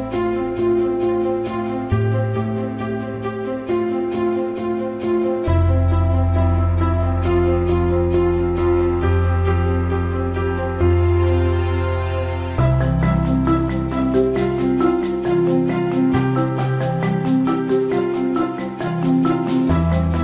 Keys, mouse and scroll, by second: 0.1 middle click, 4.1 middle click, 12.8 middle click, 14.7 middle click, 14.9 middle click, 15.1 middle click, 15.7 middle click, 17.1 middle click.